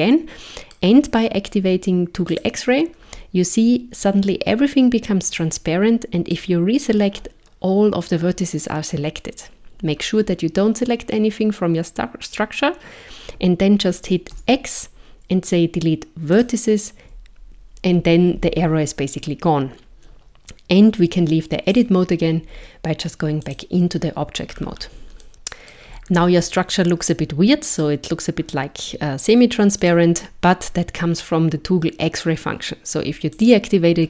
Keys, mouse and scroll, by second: 2.3 click, 6.0 click, 14.4 x, 21.7 click, 24.5-25.0 scroll down 4, 25.2 shift+middle click, 26.1-27.3 scroll up 3, 27.7 click, 29.7 click, 33.3 click.